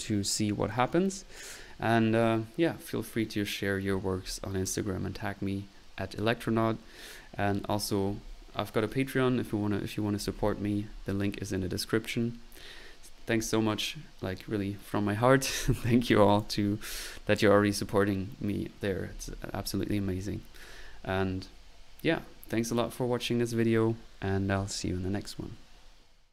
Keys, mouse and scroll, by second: 4.3 click, 16.1 click, 16.3 click, 17.4 click.